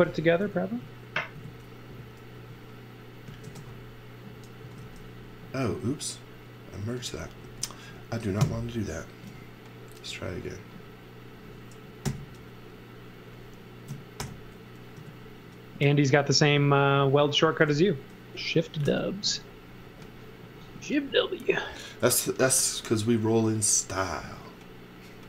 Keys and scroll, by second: 0.7 Right, 1.3 Left, 1.8 Down, 2.3 Up, 3.4-5.3 typing, 6.8 x, 7.4 space, 8.4 BackSpace, 12.0 super+c, 14.1 alt+shift+v, 14.9 m, 18.8 b.